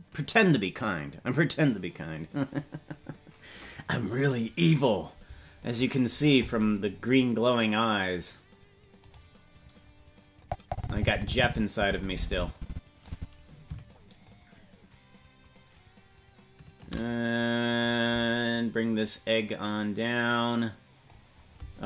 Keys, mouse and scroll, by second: 9.1-10.4 right drag, 10.4-13.1 drag, 14.2-16.9 shift+drag, 18.4-19.2 scroll down 2, 19.2 scroll down 1, 19.4-21.1 drag.